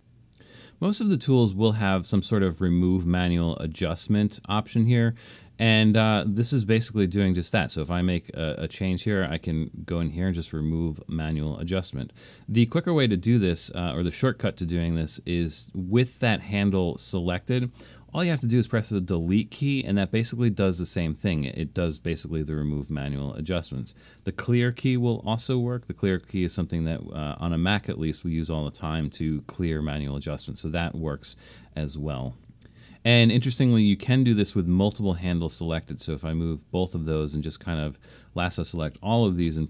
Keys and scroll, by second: 18.7 BackSpace, 25.4 9, 39.5 BackSpace.